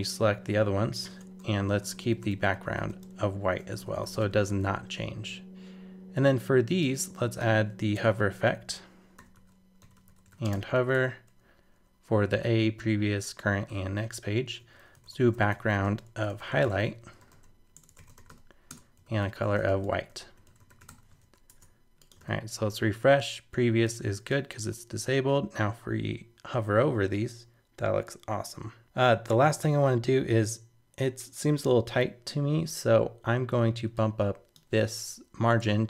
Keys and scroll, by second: 7.9 super+Return, 21.2 super+s, 21.5 super+Tab, 22.2 super+r, 31.6 super+Tab.